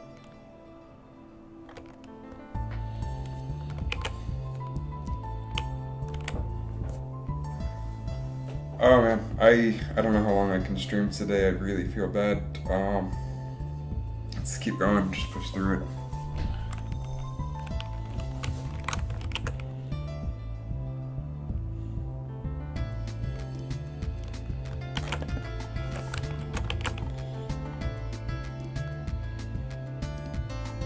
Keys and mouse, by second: 4.2 alt+a, 18.9 shift+Left, 19.3 alt+a, 25.1 alt+a, 26.0 KP_3, 26.5 shift+Left, 26.8 alt+a.